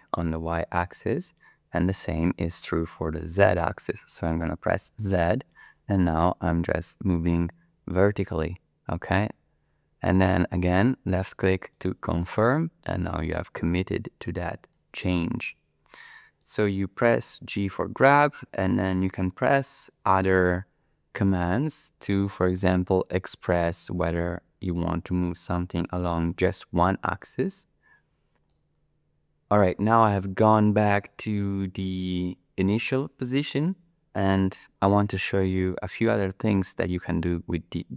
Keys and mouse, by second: 4.9 z, 11.7-13.0 drag, 13.0-16.2 middle drag, 16.2 click, 17.6 g, 26.4 x, 28.5 click, 28.6 middle click, 28.9 click, 29.0 middle click, 29.1 click, 29.3 middle click, 29.5 click.